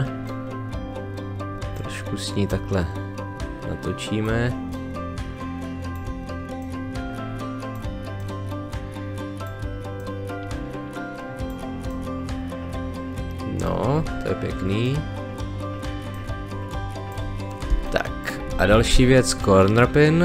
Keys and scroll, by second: 17.7 space.